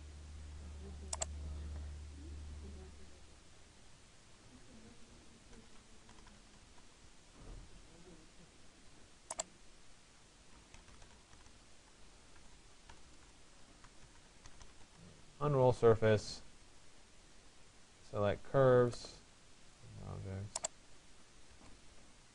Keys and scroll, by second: 6.2 Return, 11.5 BackSpace, 21.1 Return.